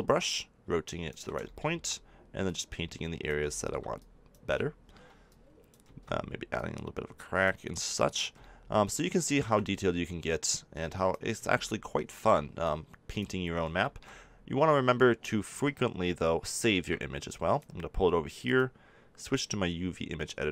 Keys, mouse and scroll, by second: 2.9-11.9 drag, 12.6-15.1 drag, 16.7-19.2 drag.